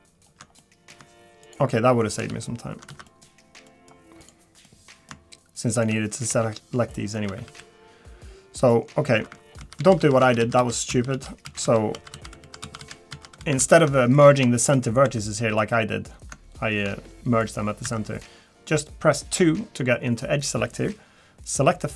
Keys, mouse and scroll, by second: 0.6 middle click, 1.4 shift+click, 2.2 shift+click, 2.8 f, 2.9 ctrl+z, 3.1 middle click, 3.7 middle click, 5.7 shift+click, 6.1 middle click, 6.3 f, 6.5 scroll down 2, 6.9 middle click, 7.3 a, 7.4 a, 7.6 middle click, 9.6 ctrl+z, 9.8 ctrl+z, 10.0 ctrl+z, 10.2 ctrl+z, 10.4 ctrl+z, 10.6 ctrl+z, 10.9 ctrl+z, 11.1 ctrl+z, 11.9 ctrl+z, 12.4 ctrl+z, 12.6 ctrl+z, 13.1 ctrl+z, 13.4 ctrl+z, 13.6 ctrl+z, 14.0 middle click, 14.2 scroll up 2, 14.6 shift+middle click, 15.0 1, 15.2 click, 15.6 g, 17.8 2, 18.1 click.